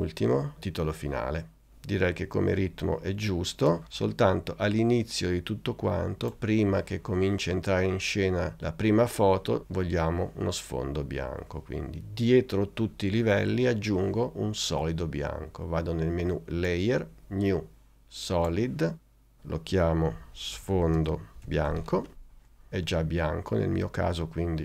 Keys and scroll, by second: 2.9 space, 20.0-22.4 typing.